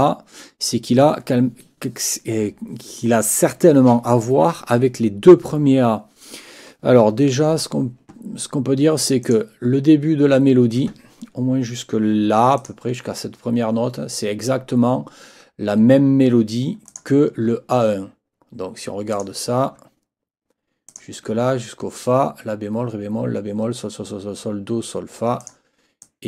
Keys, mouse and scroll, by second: 9.2 click, 12.6 shift+click, 16.9 click, 19.1 click, 20.9 shift+click, 25.4 click, 26.0 click.